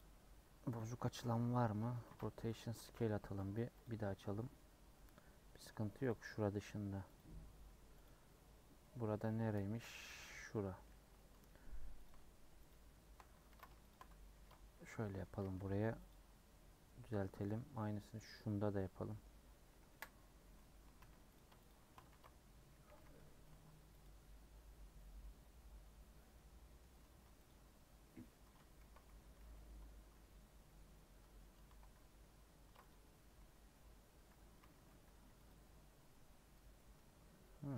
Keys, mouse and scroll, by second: 0.0 u, 0.8 click, 1.8 Tab, 2.5 ctrl+a, 2.6 Tab, 3.8 u, 6.1 click, 8.0 click, 8.9 middle click, 9.7 KP_Decimal, 10.5-12.0 middle drag, 12.0 alt+click, 13.5 ctrl+z, 13.9 alt+shift+click, 14.3 ctrl+x, 14.9 middle click, 15.3 a, 16.1 u, 17.4 click, 19.2 middle click, 19.9 KP_Decimal, 21.3 alt+click, 22.1 ctrl+x, 22.9 a, 24.0 u, 24.8 scroll down 1, 25.0-27.5 middle drag, 27.5 alt+click, 28.3 middle click, 28.8 ctrl+x, 29.4 ctrl+z, 30.1-32.6 middle drag, 32.6 ctrl+r, 33.7 middle click, 34.4 a, 35.5 u, 36.3 scroll down 4.